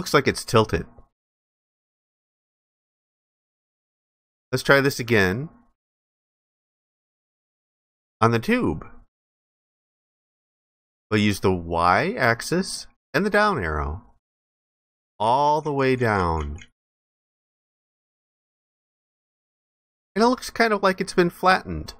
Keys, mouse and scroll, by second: 4.1 alt+click, 7.2 ctrl+alt+click, 18.0 alt+click, 20.1 alt+click.